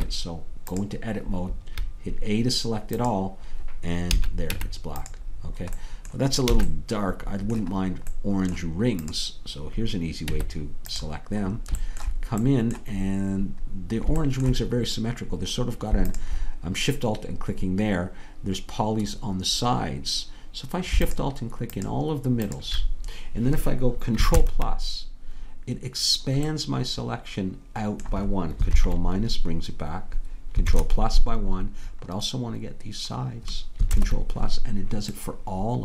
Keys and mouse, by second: 0.0 Tab, 1.5 a, 3.3-4.5 drag, 4.5 Tab, 6.6 a, 10.4 Tab, 21.3-24.4 drag, 24.4 ctrl+KP_Add, 26.1-28.8 middle drag, 28.8 ctrl+KP_Subtract, 30.7 ctrl+KP_Add, 35.4-35.8 middle drag.